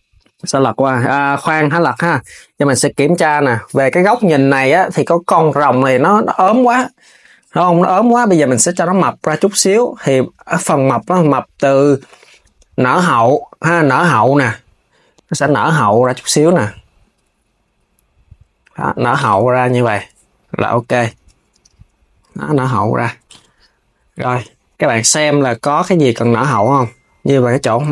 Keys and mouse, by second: 0.1 click, 0.8 s, 1.0 right click, 1.0 s, 1.4 click, 2.8 KP_1, 6.0 s, 6.4 KP_3, 8.8 click, 9.0 Tab, 9.7 click, 10.4 shift+click, 12.6 shift+click, 13.3 click, 16.1 click, 16.7 shift+click, 17.4 click, 18.8 KP_3, 20.6 Tab, 22.9 Tab, 24.9 s, 26.2 click, 27.3 Tab.